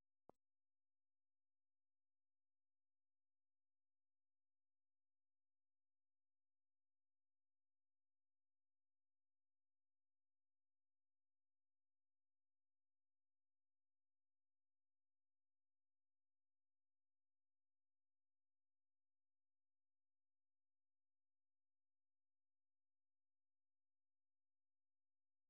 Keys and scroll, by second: 3.2 ctrl+w, 9.5 ctrl+c, 12.2 super+1, 15.2 super+2.